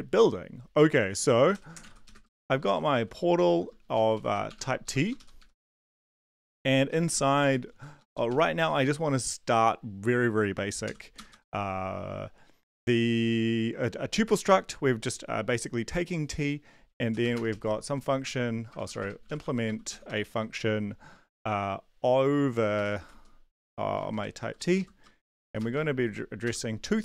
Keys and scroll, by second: 0.1 Down, 1.1-8.3 typing, 10.8 typing, 11.1 Return, 11.3 Return, 17.0-20.1 typing, 22.3-26.0 typing, 24.0 Return, 24.7 Left, 25.4 Right, 26.4 Return.